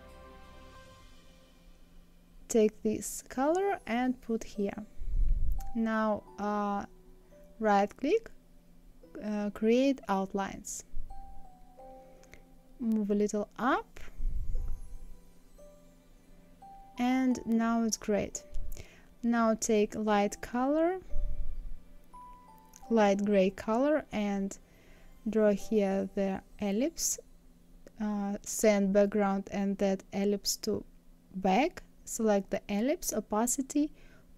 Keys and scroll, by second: 11.6 Up, 12.8 Right, 13.7 Down, 14.7 Right.